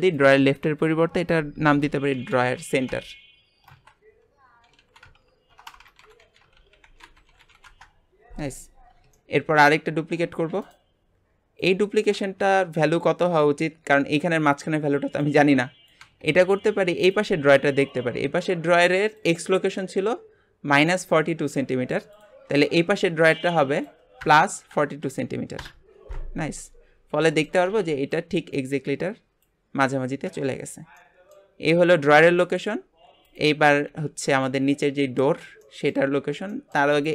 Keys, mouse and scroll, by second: 5.7 BackSpace, 8.9 scroll down 1, 9.1-10.2 shift+middle drag, 10.2 shift+d, 11.6 click, 17.0 click, 19.2-22.2 drag, 22.5 click, 23.8-26.6 drag, 26.6-30.5 middle drag, 30.6-30.9 scroll down 2, 30.9-32.1 middle drag, 32.1 scroll down 1, 32.4-32.9 shift+middle drag, 32.9-33.2 scroll up 1, 33.2 click, 33.8 g, 34.8-36.9 middle drag, 36.9 click.